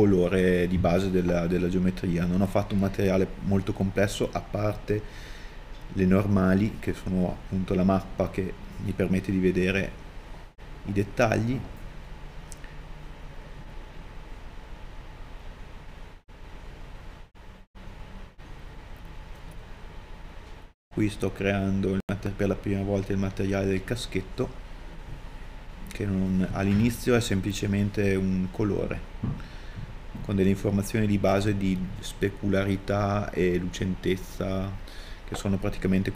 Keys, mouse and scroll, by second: 12.2 scroll down 1, 12.7 middle click, 15.4 right click, 23.8 scroll up 1, 24.4 middle click, 25.0-25.8 scroll up 1.